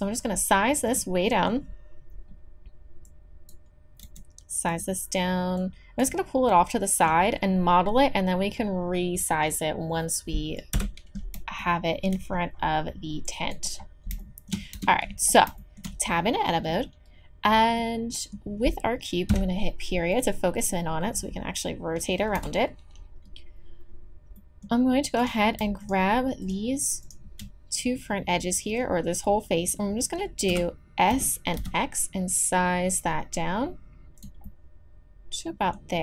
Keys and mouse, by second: 1.3-4.0 drag, 4.0 s, 6.5 middle click, 7.3 click, 10.7 KP_1, 14.7 Tab, 19.3 KP_Decimal, 22.4 KP_1, 30.5 KP_1, 31.1 s, 34.4-36.0 drag.